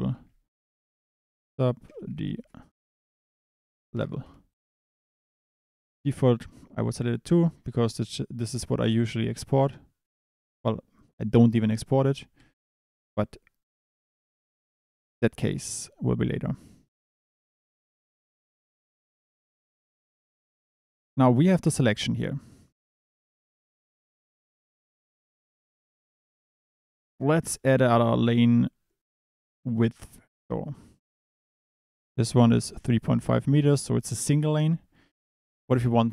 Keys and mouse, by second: 1.0 BackSpace, 7.5 click, 8.9 click, 9.6 click, 12.4 KP_7, 13.2 click, 14.0 click, 15.7 click, 16.6 click, 24.5 Escape, 25.8 click, 28.2 click, 30.2 click, 30.7 click, 33.6 click, 35.7 click.